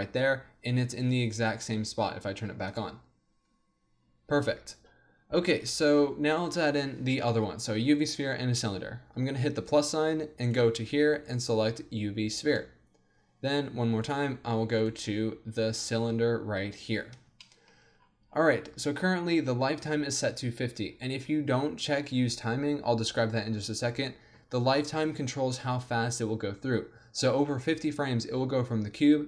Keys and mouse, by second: 4.0-9.6 middle drag, 9.6-12.1 drag, 17.5-20.5 middle drag, 20.9-24.0 middle drag.